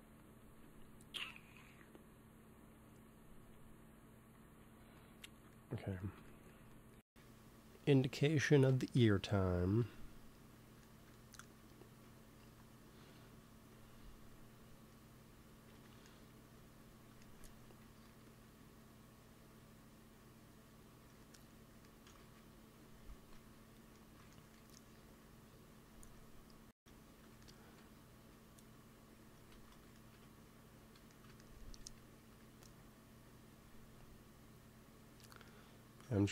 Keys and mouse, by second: 5.0-7.1 drag, 7.5 f, 8.6 KP_1, 9.6 KP_3, 12.3 ctrl+s, 17.7 g, 17.9 f, 18.7-19.8 drag, 22.1 ctrl+z, 23.0 ctrl+s, 25.0 f, 25.6 f, 26.1-28.0 drag, 28.1 f, 28.7-29.7 drag, 29.4 ctrl+z, 31.7 f, 32.2 f, 32.6-36.3 drag.